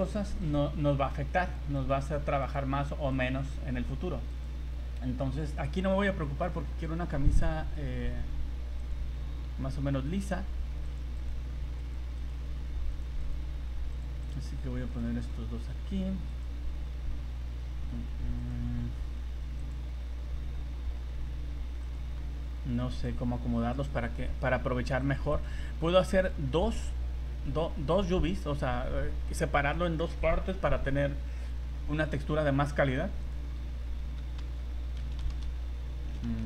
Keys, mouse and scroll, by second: 0.4 right click, 0.8 g, 1.8 right click, 2.0 g, 3.1 right click, 3.3 g, 8.8 right click, 9.9 g, 11.2 right click, 11.3 g, 12.2 right click, 12.3 g, 13.2 right click, 13.4 g, 14.2 right click, 14.4 g, 15.2 right click, 15.7 g, 18.4 right click, 18.8 g, 21.8 right click, 22.2 g, 23.7 right click, 23.9 g, 25.3 right click, 25.6 g, 28.3 scroll down 1, 28.6 scroll up 1, 32.1 right click, 34.4 r.